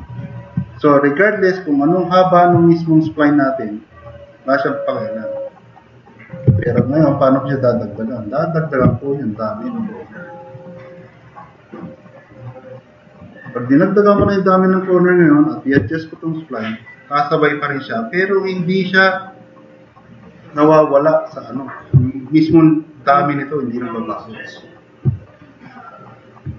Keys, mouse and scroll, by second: 1.0 middle click, 3.6 click, 4.3 drag, 4.6-6.4 super+drag, 6.7 ctrl+z, 16.1 drag, 16.7-17.2 drag, 17.6-18.5 drag, 18.7-21.7 drag, 22.1 click, 22.2 middle click, 25.2-26.3 drag.